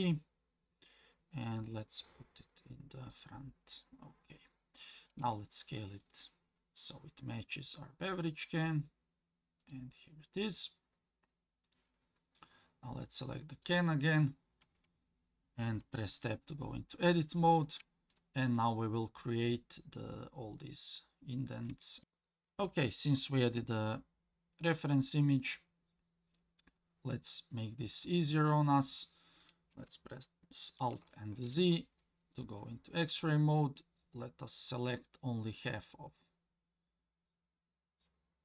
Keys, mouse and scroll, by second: 3.1 click, 5.2 s, 13.6 click, 14.6 Tab, 16.5-17.7 scroll up 4, 18.1 shift+middle click, 21.8 shift+middle click, 22.0 ctrl+z, 22.0 scroll down 2, 24.0-26.5 scroll down 2, 30.8 alt+z, 32.3-34.2 drag, 35.6-38.4 drag.